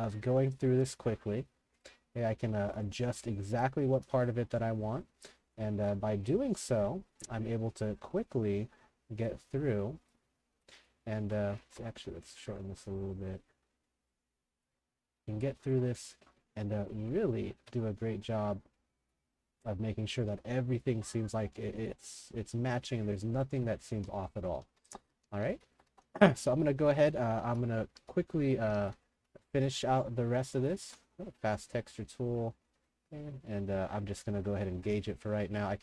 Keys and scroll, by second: 4.1 a, 5.8 ctrl+g, 11.7 ctrl+g, 17.5 ctrl+g, 23.4-30.0 typing, 30.8 ctrl+g.